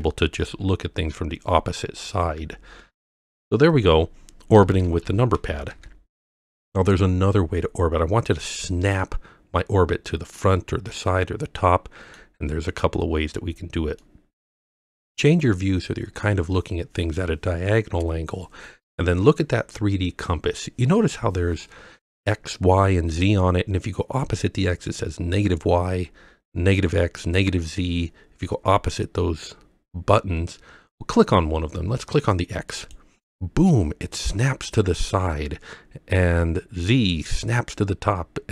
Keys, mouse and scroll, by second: 0.0-0.3 typing, 2.4 KP_9, 4.6-5.7 typing, 9.0-12.2 middle drag, 14.0-14.9 middle drag, 32.7 click, 36.9 click.